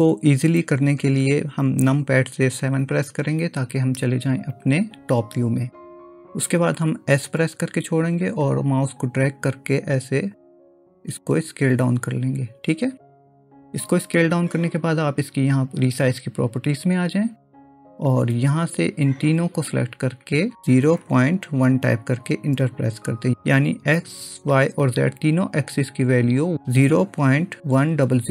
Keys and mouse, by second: 2.8 KP_7, 7.2 s, 16.8 click, 18.5-23.4 drag.